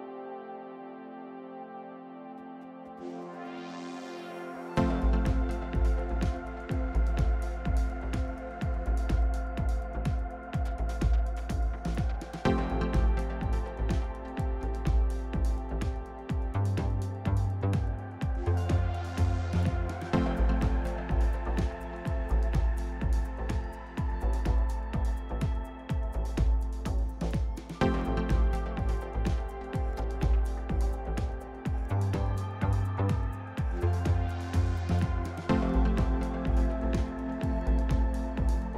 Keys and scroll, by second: 1.3-2.9 typing.